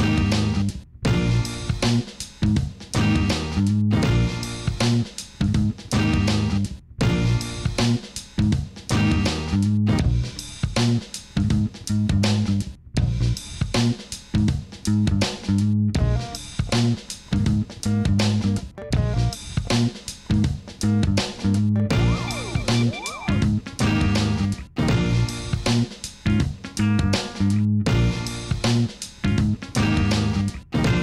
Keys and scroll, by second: 9.9 Escape, 10.5 Escape, 10.9 ctrl+z, 19.4 g, 19.5 y, 20.7 Escape, 22.0 g, 22.1 y, 23.8 alt+a.